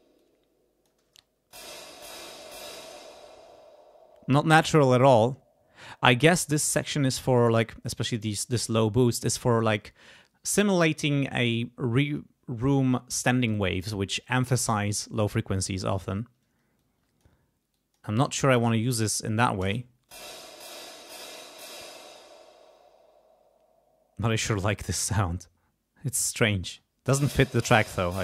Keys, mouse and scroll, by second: 0.2 click, 1.0 space, 2.8 space, 8.7-9.7 drag, 16.8 click, 17.7 click, 18.2 click, 18.8 click, 19.6 space, 20.1 click, 21.7 space, 25.0-26.3 drag, 26.6 space.